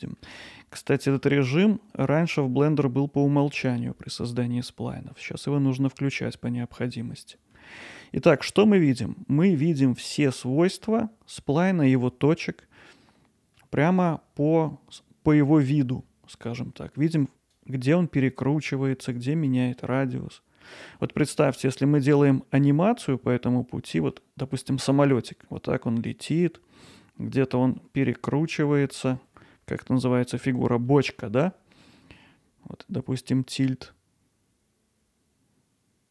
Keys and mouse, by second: 0.5 ctrl+alt+middle click, 1.6 alt+middle click, 2.7-3.7 middle drag, 4.6 middle click, 7.0 middle click, 7.9-9.5 alt+middle drag, 13.1 middle click, 18.6 middle click, 19.7 middle click, 21.0 middle click, 24.0 middle click, 27.5 middle click, 28.5 alt+middle click, 30.9 middle click, 31.8 alt+middle click.